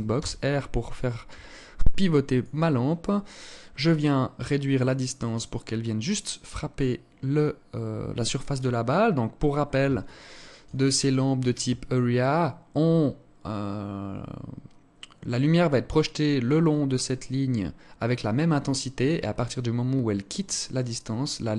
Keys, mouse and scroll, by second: 3.4 click, 8.4 scroll up 2, 9.5 alt+shift+click.